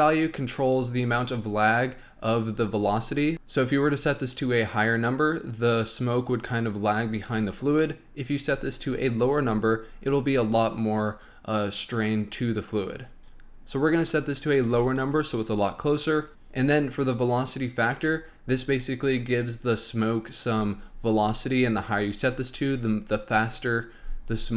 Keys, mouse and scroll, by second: 14.0 click.